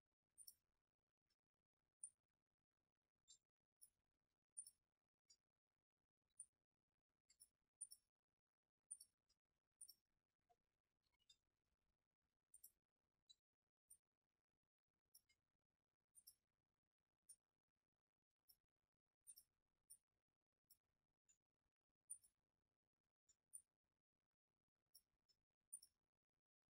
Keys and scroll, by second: 11.8 alt+].